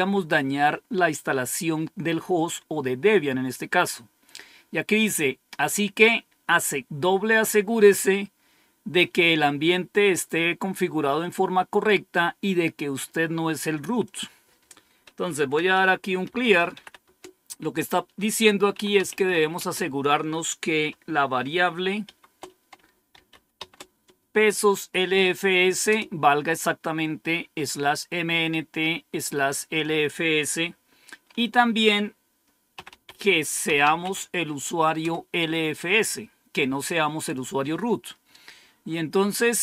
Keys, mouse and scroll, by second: 13.9 click, 15.4-17.1 typing, 18.4-19.6 typing, 21.7-24.0 typing, 25.8 typing, 32.4-34.4 typing, 34.9 Return.